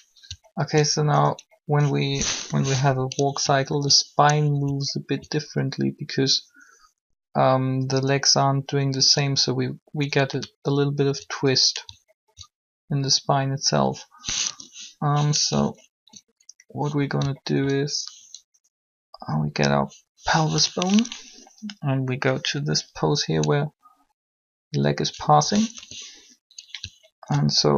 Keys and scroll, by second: 2.4 3, 15.6 1, 25.7 1.